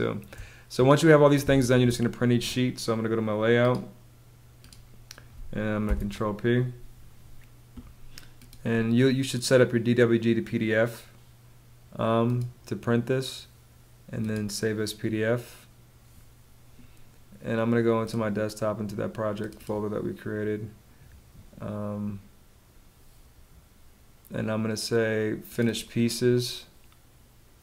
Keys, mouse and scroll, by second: 5.3 super+p.